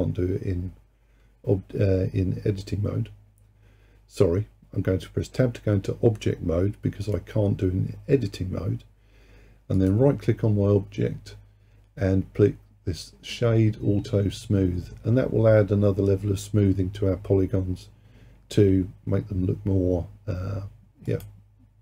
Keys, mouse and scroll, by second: 9.8-12.9 right drag.